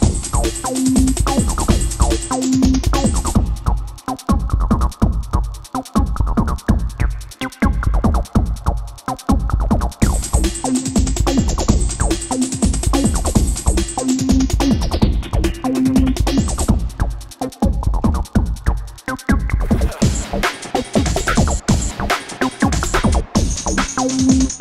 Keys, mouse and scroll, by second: 0.3-1.4 drag, 4.4 alt+scroll down 1, 4.8-5.2 alt+scroll up 1, 5.2-7.4 drag, 7.4-7.9 click, 8.1 alt+scroll down 1, 8.4 click, 9.2 alt+scroll up 1, 9.5-9.9 drag, 12.6 ctrl+a, 13.9 Caps_Lock, 14.2-18.5 typing, 17.0 alt+Tab, 18.7 ctrl+a, 19.4 ctrl+shift+,, 21.8 click, 22.6 alt+scroll up 1, 22.9 click.